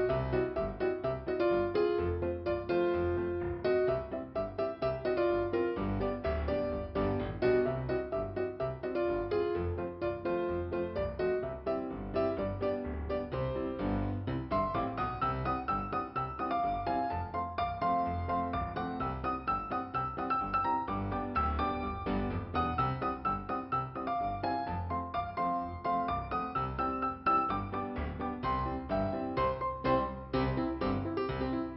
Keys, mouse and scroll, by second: 4.6 scroll up 1, 6.8 click, 8.5 click, 10.1 click, 10.5 Return, 11.6 click, 13.4 click, 13.8 Return, 14.8 click, 16.0 click, 17.9 Return, 19.1 click, 19.8 click, 23.0 click, 23.4 click, 23.9 click, 24.8 click.